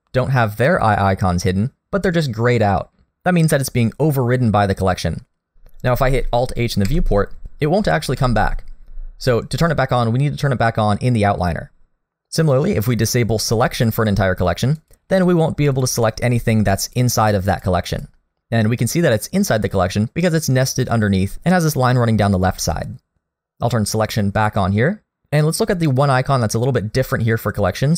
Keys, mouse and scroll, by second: 6.9 alt+h, 7.4 alt+h, 8.2 alt+h, 11.4 click, 14.8 click, 15.0 scroll down 2, 15.2 middle click, 15.7 click, 16.4 click, 16.9 click, 17.2 click, 17.5 click, 17.9 click, 24.4 click.